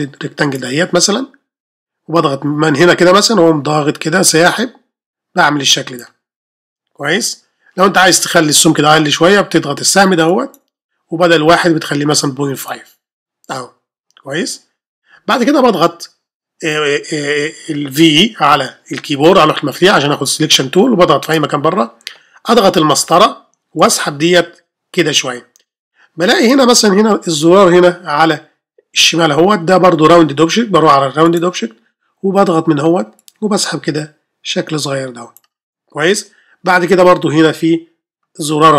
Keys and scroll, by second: 19.7 typing, 23.0 space.